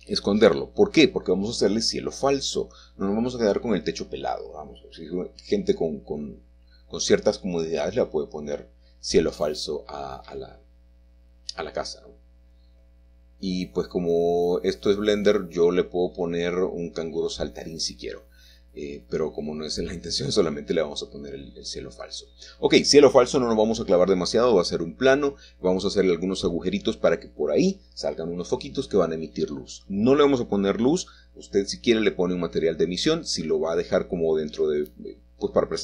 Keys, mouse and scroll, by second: 0.0 h, 1.8-4.6 middle drag, 4.0-4.6 scroll up 2, 4.6-5.0 scroll up 1, 6.7 click, 13.9 s, 15.7 click, 17.4 g, 18.7 click, 20.0 s, 22.9 click, 25.8 s, 28.2 click, 29.1 y, 32.1 alt+click, 33.7 h, 34.8-35.8 middle drag.